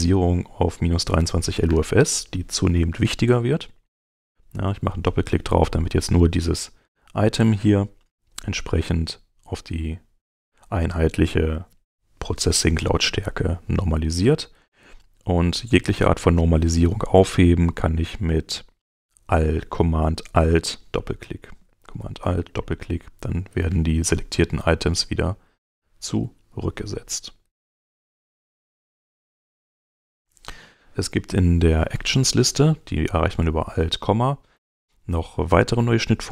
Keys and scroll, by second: 14.3 super+Tab, 20.0 super+Tab, 25.9 Home, 27.3 super+Tab.